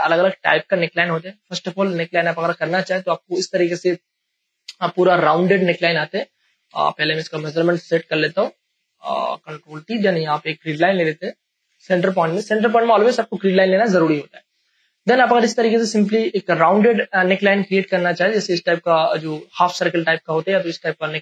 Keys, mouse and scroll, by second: 0.0 space, 2.0 click, 2.1 click, 2.8 p, 4.5 click, 6.6 Delete, 7.6 click, 7.9 ctrl+a, 8.4 ctrl+t, 9.7-11.5 drag, 11.4 Return, 12.4 ctrl+d, 12.9 p, 15.4-21.2 drag.